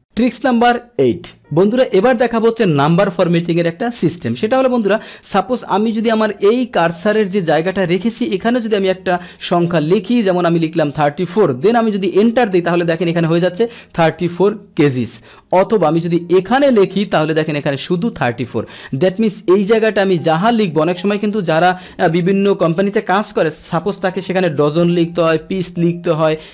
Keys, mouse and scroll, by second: 4.8 click, 12.2 Return, 15.5 click, 16.9 click, 17.9 click, 19.8 click, 20.5 click, 21.3 click, 24.7 click.